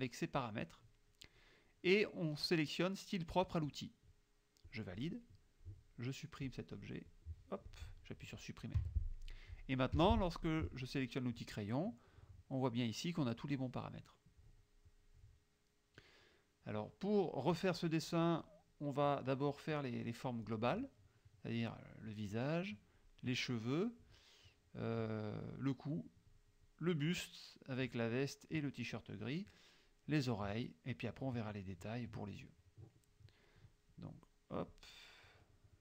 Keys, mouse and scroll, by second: 4.8 click, 7.2 click, 8.9 Delete, 10.1 F6, 13.4 click, 14.9 click, 15.6 click, 16.5 click, 18.2 click, 25.6 click, 29.1 click, 34.7-35.8 drag.